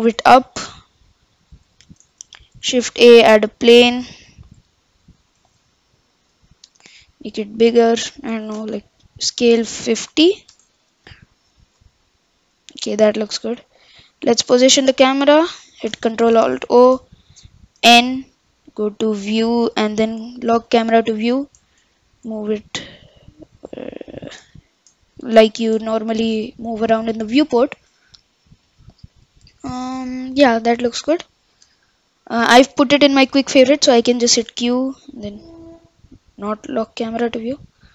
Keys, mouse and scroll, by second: 2.4 shift+a, 3.6 d, 4.5 s, 6.5-6.8 scroll down 5, 6.8 s, 8.2 ctrl+z, 9.3 s, 10.7 click, 11.0 middle click, 11.1-11.8 scroll down 6, 11.8-12.8 middle drag, 12.8-13.3 scroll up 8, 13.7 scroll down 3, 14.0 scroll up 1, 14.2 middle click, 14.8-15.2 scroll down 2, 15.2-16.3 scroll up 2, 16.3 ctrl+alt+KP_0, 17.8 n, 18.4 n, 19.3 click, 20.6 click, 21.1 n, 21.9-22.3 shift+middle drag, 22.3-22.7 scroll down 1, 22.7-25.1 middle drag, 25.1-25.4 scroll up 1, 25.4 shift+middle drag, 25.7-26.4 scroll down 1, 26.4-31.1 shift+middle drag, 34.3 q.